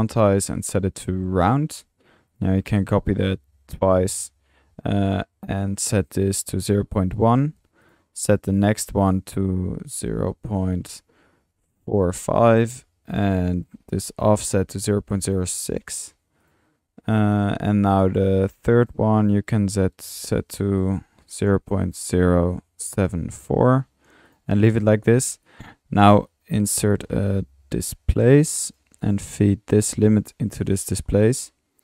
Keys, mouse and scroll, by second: 2.8-3.7 typing, 26.7-27.4 typing.